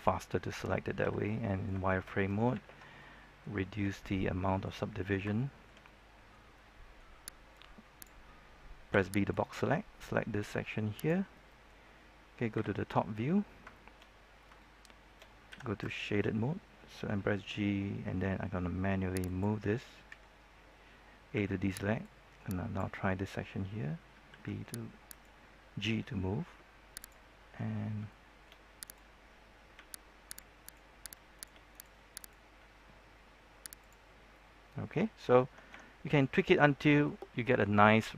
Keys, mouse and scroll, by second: 1.0 z, 1.2 middle click, 1.8 shift+middle click, 2.9 ctrl+1, 2.9-5.2 middle drag, 3.8 Caps_Lock, 7.5 click, 8.9 b, 9.2-11.3 drag, 11.3-12.4 middle drag, 13.1 scroll down 1, 13.1 KP_7, 13.7 shift+middle click, 14.0-14.4 scroll up 1, 14.5 shift+middle click, 15.9 shift+middle click, 17.0 g, 19.2 click, 20.0 a, 21.3 b, 22.0-23.5 drag, 24.2 b, 25.0 right click, 25.8 g, 26.9 click, 27.3 scroll down 1, 27.5-27.9 scroll up 1, 28.0 shift+middle click, 28.8 right click, 29.7 g, 30.2 click, 30.6 right click, 31.3 shift+right click, 32.1 shift+right click, 32.7 shift+g, 33.7 click, 34.0-34.5 scroll down 1, 34.5 scroll up 1, 34.8-35.6 scroll down 1, 35.6 Tab, 36.0 scroll down 1, 36.3 middle click, 37.2 scroll up 1, 37.4-38.1 middle drag.